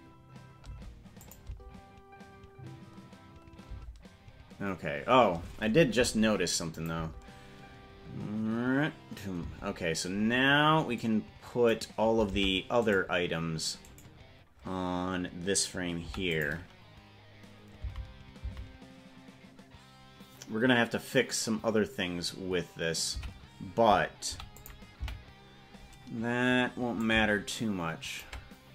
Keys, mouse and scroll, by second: 1.0 space, 1.4-4.1 drag, 1.6 space, 4.0 space, 6.9 click, 7.2 space, 9.6 space, 11.1 click, 12.6 ctrl+Tab, 13.2 right click, 14.2 right click, 16.3 i, 18.1 Right, 18.7 Right, 23.5 Left, 24.5 i, 25.3 Right, 27.1-28.4 ctrl+drag.